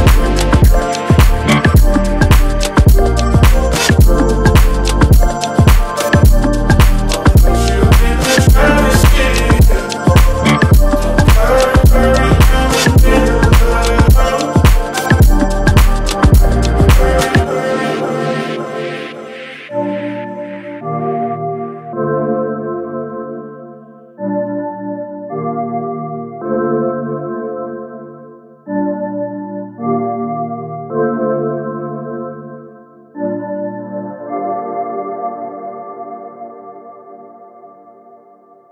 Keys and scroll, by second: 1.6 Right, 2.7 Right, 3.1 Up, 3.5 Right, 4.4 Up, 7.5 i, 15.7 Return, 19.1-19.6 typing, 19.9 Return, 20.9 space, 22.6 space, 29.8 1, 29.9 5, 30.1 Return, 32.7 1, 32.8 5, 33.3 Return, 34.8 space, 35.5 r.